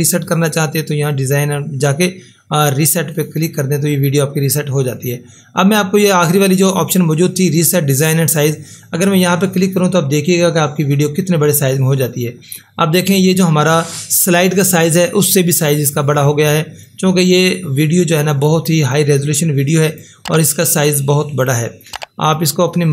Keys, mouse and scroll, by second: 1.1 click, 1.2 click, 6.6 click, 10.9 click, 16.8-22.9 drag.